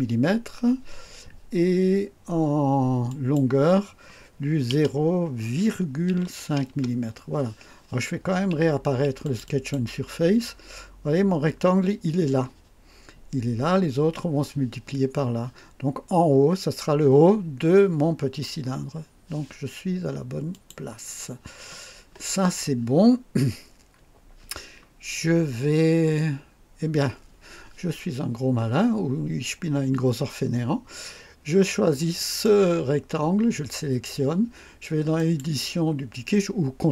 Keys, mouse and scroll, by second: 3.0 click, 4.7 KP_0, 6.0 ,, 6.2 KP_5, 6.6 KP_Enter, 9.2 click, 10.4-10.7 scroll down 2, 20.5 click, 25.1-25.4 scroll up 2, 26.3-26.8 scroll down 4, 32.1 click, 35.1 click.